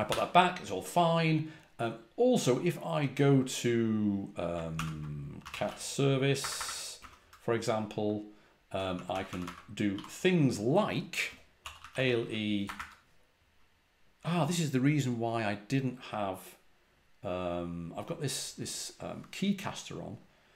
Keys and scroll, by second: 0.0 u, 4.6 ctrl+p, 5.1-7.0 typing, 8.7-12.7 typing.